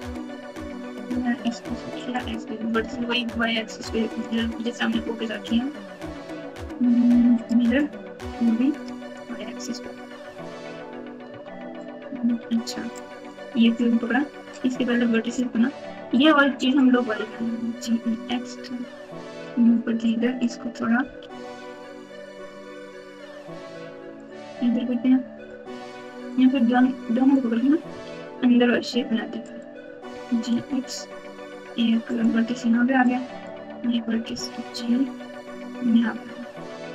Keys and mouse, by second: 0.2 click, 1.7 x, 2.9 Tab, 4.2-7.4 drag, 8.7 click, 9.1 click, 10.2 alt+z, 11.2 Tab, 12.4 alt+z, 12.9 click, 16.2 click, 17.3 g, 20.0 click, 21.0 g, 26.2 click, 26.4 click, 27.8 g, 30.0 g, 33.0 click, 34.2 g, 36.6 click.